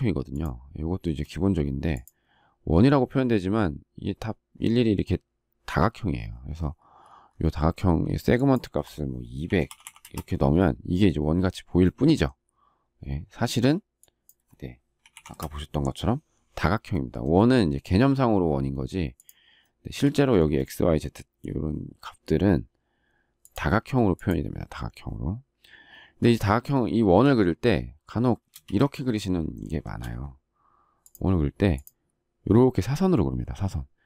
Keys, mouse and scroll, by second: 1.0 space, 10.0 Return, 15.3 Return, 19.6 shift+middle click, 20.4 space, 28.5 space, 28.6 Escape, 29.6 shift+middle click.